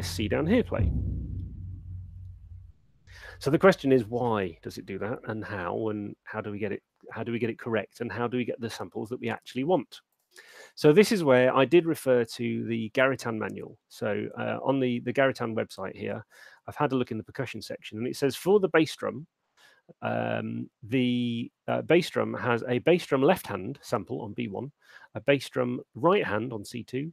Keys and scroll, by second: 3.2 space.